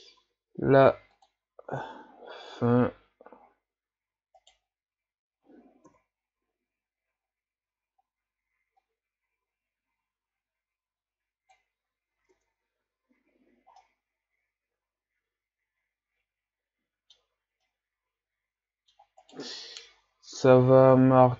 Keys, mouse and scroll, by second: 0.2 s, 1.7 s, 5.9 KP_3, 8.0-8.7 scroll up 2, 8.7 scroll up 1, 8.8-11.8 drag, 12.3 Tab, 12.8 a, 13.1-13.8 scroll down 1, 13.8-16.8 middle drag, 17.7-19.2 middle drag, 19.2 right click, 19.5 Tab, 20.4-21.3 drag.